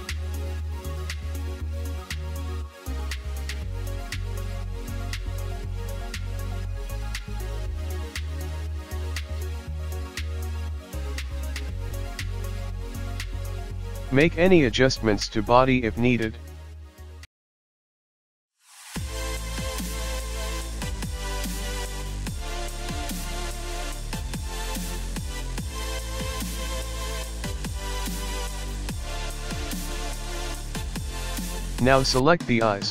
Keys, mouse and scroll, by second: 0.9 click, 0.9 KP_1, 1.2 click, 1.8 s, 3.1 middle click, 3.9 1, 4.2 1, 4.4 KP_1, 4.9 click, 5.4 g, 7.1 middle click, 7.8 KP_1, 7.9 KP_3, 9.4 g, 9.8 click, 10.2 KP_1, 10.3 click, 10.6 scroll down 12, 11.0-11.4 scroll up 6, 11.5 click, 11.5-12.2 scroll down 1, 12.2 scroll down 1, 13.4 click, 13.5 click, 13.7 click, 14.1-14.6 scroll up 2, 14.7 click, 14.9-15.6 scroll up 3, 15.6 Tab, 16.7 l, 17.9 s, 20.7 click, 21.3 s, 22.6 ctrl+z, 22.7 ctrl+z, 22.9 ctrl+z, 23.2 ctrl+z, 23.3 click, 23.6 Tab, 23.7 click, 24.6 scroll down 6, 24.8 shift+middle click, 24.9 scroll up 3, 25.0 shift+middle click, 27.3 click, 28.6 click, 29.9 click, 30.6 click, 31.1 click, 32.3 click, 32.5 shift+click.